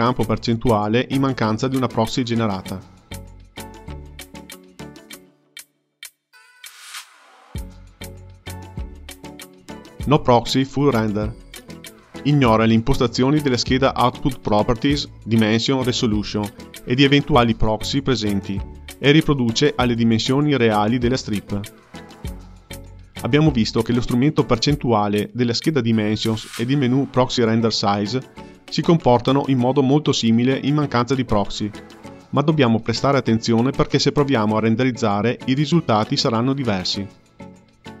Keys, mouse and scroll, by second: 0.7-7.7 drag, 9.4-18.7 drag, 21.2-22.7 drag, 29.0 click, 31.8-34.9 drag, 36.5-38.0 drag.